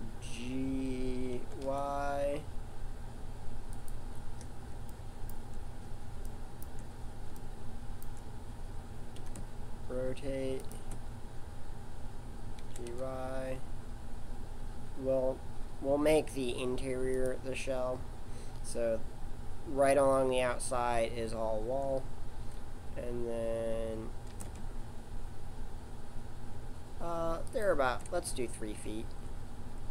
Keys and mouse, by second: 1.3 g, 9.1 r, 12.7 g, 24.3 shift+d, 29.6-29.9 middle drag.